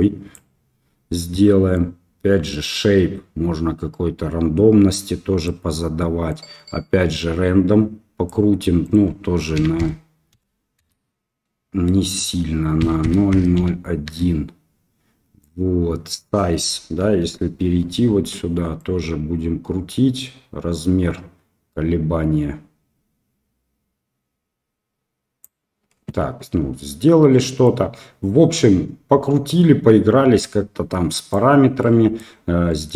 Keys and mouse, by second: 1.8-5.5 drag, 6.3-8.3 drag, 8.9-11.3 drag, 12.2-14.7 drag, 15.9 click, 17.0 KP_1, 19.2-25.7 drag, 27.6-31.4 drag, 31.8 middle drag, 32.6 middle click, 32.7 click.